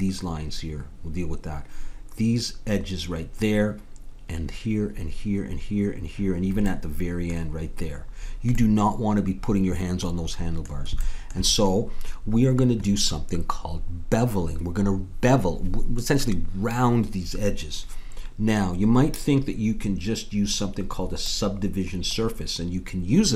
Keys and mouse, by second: 6.7 middle click, 7.1-10.4 middle drag, 11.0-12.8 middle drag, 21.2-23.2 drag.